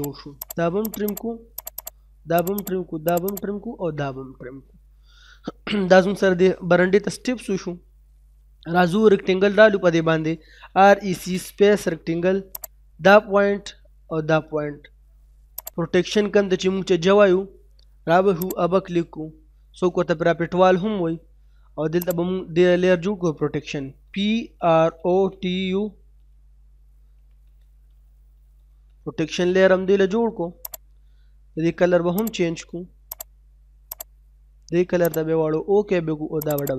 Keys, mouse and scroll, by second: 0.0 click, 3.6-4.0 scroll down 1, 4.0 middle click, 4.3 scroll down 1, 4.6 middle click, 5.4-5.8 scroll up 1, 5.8 middle click, 6.4 scroll down 1, 6.5 middle click, 7.5 scroll up 1, 7.8 middle click, 10.2-11.2 typing, 11.6-11.9 scroll up 1, 12.6 click, 12.8 scroll down 1, 15.1-15.4 scroll up 1, 15.9 scroll down 1, 16.0 middle click, 16.2 scroll up 1, 16.8 middle click, 18.4 click, 22.0 click, 23.9-25.1 typing, 26.7-28.9 typing, 30.7 click.